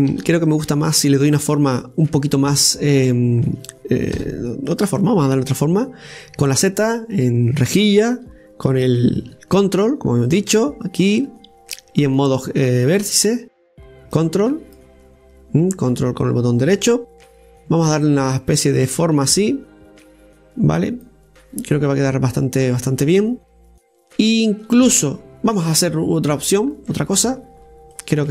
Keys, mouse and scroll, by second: 1.0 ctrl+r, 5.0 KP_7, 7.3 z, 10.6-13.1 ctrl+drag, 14.2 right click, 15.0 ctrl+click, 16.5 ctrl+click, 19.1-22.1 drag, 22.4-22.7 scroll down 2, 22.7-25.7 middle drag, 27.5 click.